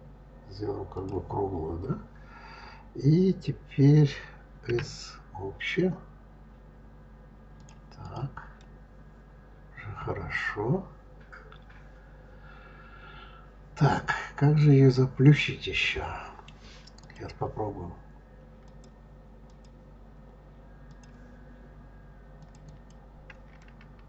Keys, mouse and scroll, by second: 4.5 s, 7.8 click, 8.3-11.4 middle drag, 16.8 click, 18.5-20.8 drag, 22.2 click, 22.5 click, 23.4-24.0 middle drag.